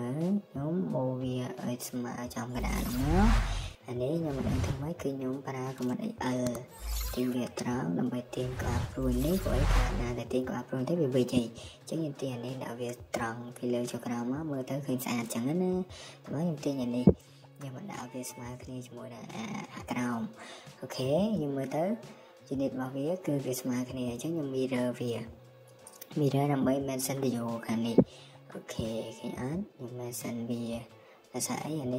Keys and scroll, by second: 0.1 typing, 2.3 Escape, 3.6 Escape, 3.7 Escape, 4.5-5.2 typing, 6.4 Escape, 12.4 Escape, 13.8 typing, 14.0 Escape, 14.7 Escape, 17.5 Escape, 18.5 Escape, 19.4 Escape, 20.2-21.1 typing, 24.2 Escape.